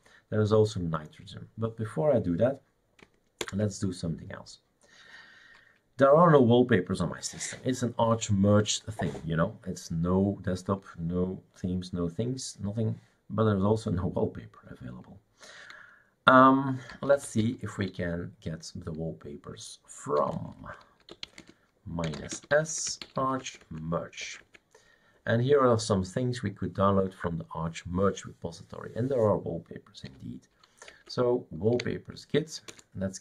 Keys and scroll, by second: 3.6 super+Return, 16.7-17.8 typing, 19.9-23.7 typing, 24.2 Tab, 24.4 Tab, 30.1 w, 30.9 Tab, 31.7 Delete, 32.7 Return.